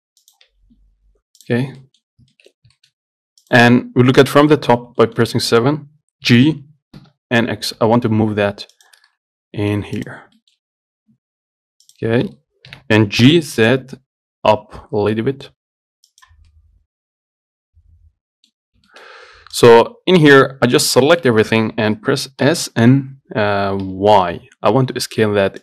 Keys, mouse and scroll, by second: 0.7 scroll down 1, 0.9 Tab, 1.3-1.7 scroll down 2, 1.7 click, 1.9 scroll up 1, 2.1 middle click, 2.3 scroll down 3, 2.6 shift+middle click, 2.8 scroll up 3, 3.0 shift+middle click, 3.7 click, 4.4 KP_7, 5.3-6.5 shift+middle drag, 6.5 g, 9.4 middle click, 10.2 click, 10.7-12.1 shift+middle drag, 12.1 click, 13.0 g, 16.7-18.8 middle drag, 18.8 scroll up 1, 19.1 shift+middle click, 19.3 scroll up 1, 19.8 click, 20.7 Tab, 21.4 a, 22.7 s.